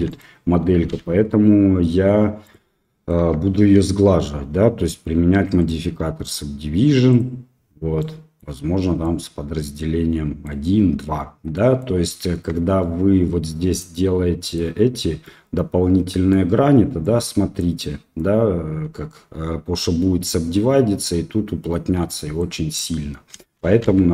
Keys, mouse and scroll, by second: 0.0 click, 0.8 x, 2.8 click, 3.1 Tab, 7.2 click, 7.9-8.4 middle drag, 9.0-10.4 middle drag, 11.5 middle click, 12.3 Tab, 13.2 middle click, 13.7 click, 13.9 middle click, 15.2-16.3 middle drag, 17.0 middle click, 22.0 middle click, 23.3 ctrl+z, 23.8 ctrl+z.